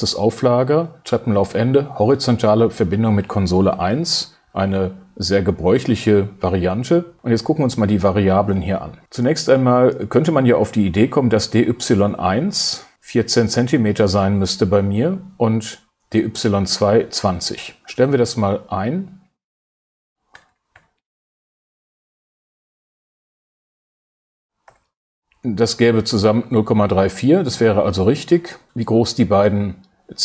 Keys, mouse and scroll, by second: 19.1-20.2 drag, 20.3 BackSpace, 21.5 shift+\, 21.8 4, 23.6 BackSpace, 25.0 2.